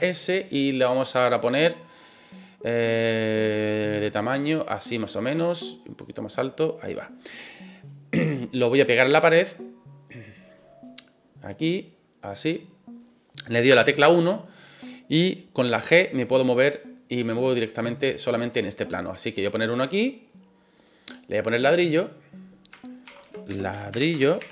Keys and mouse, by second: 1.0 click, 2.9 middle click, 4.3 s, 5.2 click, 6.0 click, 7.8 middle click, 8.6 middle click, 10.2 click, 10.5 middle click, 11.5 click, 12.5 middle click, 13.6 KP_1, 15.7 g, 19.8 click, 21.7-24.5 drag, 24.2 l.